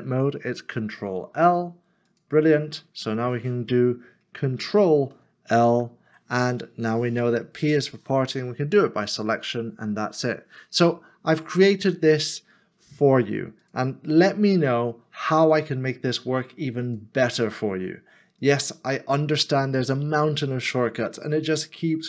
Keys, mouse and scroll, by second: 4.4 s, 5.7 ctrl+l, 7.6 p.